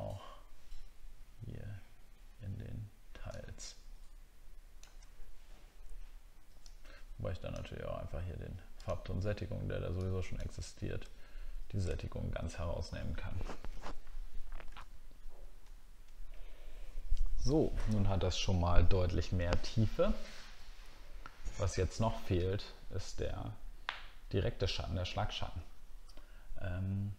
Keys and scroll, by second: 11.9 alt+scroll down 1, 15.7-16.7 alt+scroll down 1.